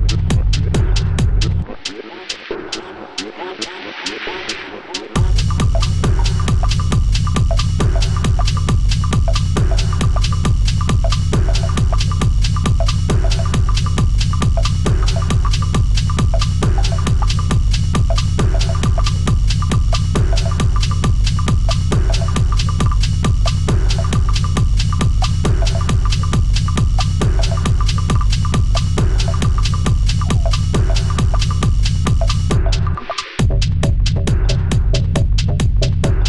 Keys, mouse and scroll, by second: 0.1 3, 0.3 click, 1.1 i, 2.4 e, 3.6 i, 5.6 e, 6.7-8.6 middle drag, 8.6-9.4 scroll down 2, 9.4 Tab, 9.8-10.4 middle drag, 10.4 scroll down 1, 10.5 middle click, 11.2 `, 12.2 g, 18.3 click, 19.6 click, 19.8 click, 20.4-20.9 scroll down 6, 20.9-22.0 middle drag, 22.0 scroll up 2, 22.2 drag, 22.4-23.7 middle drag, 23.7-24.2 scroll up 4, 24.2-24.5 middle drag, 24.5 click, 24.9-26.8 middle drag, 26.8 Tab, 27.1-27.8 scroll up 1, 27.8 3, 28.0 click, 28.8 i, 31.3 e, 32.9 i, 34.7 e, 35.2-35.6 scroll up 1, 35.6 s.